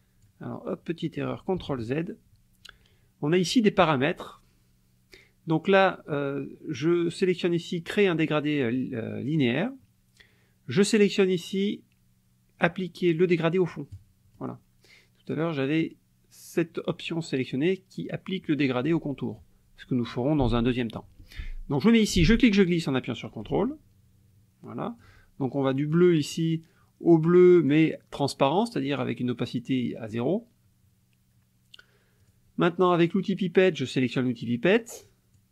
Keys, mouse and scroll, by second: 1.6 ctrl+z, 7.9 click, 14.0 click, 22.2-25.2 drag, 25.9 click, 27.5 click, 32.2 click, 35.1 click.